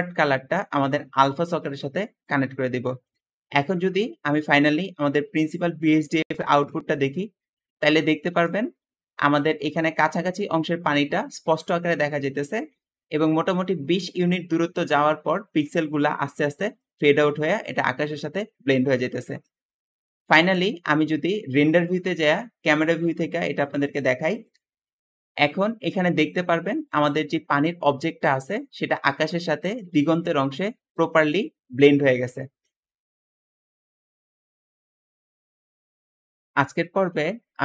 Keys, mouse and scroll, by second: 4.2 middle click, 6.1 ctrl+shift+click, 9.6 `, 11.7 Escape, 11.8 Escape, 12.7 `, 12.8 Escape, 19.1 Escape, 20.4 KP_0, 20.5 KP_0, 25.1 `, 32.5 Escape, 32.5 Escape.